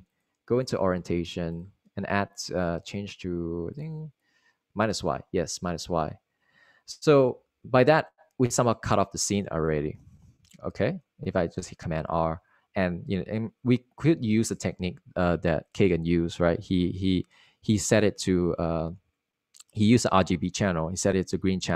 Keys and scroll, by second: 10.3 super+r.